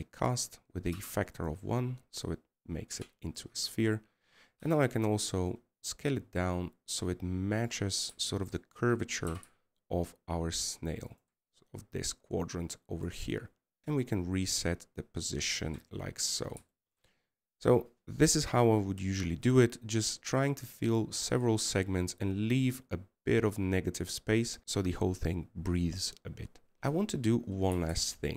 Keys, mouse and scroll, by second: 9.7-10.0 scroll up 3, 10.0 middle click, 17.8-18.5 scroll down 5, 18.5 middle click, 18.9-21.8 scroll up 3, 26.8-27.1 scroll down 1.